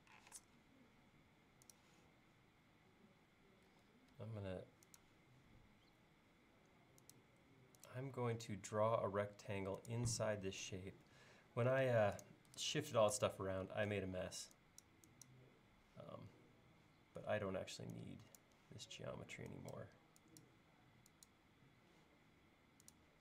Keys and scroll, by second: 0.3 r, 3.8 l, 11.9 space, 13.2 BackSpace, 14.2 e.